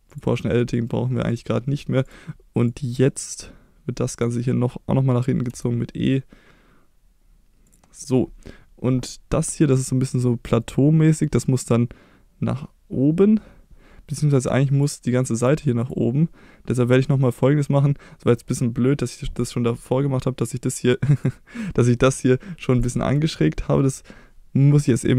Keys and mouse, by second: 0.1 click, 1.3 click, 2.7-4.2 drag, 5.5 e, 7.7 click, 9.4-14.8 drag, 15.4 click, 17.2-21.2 drag, 22.7 click.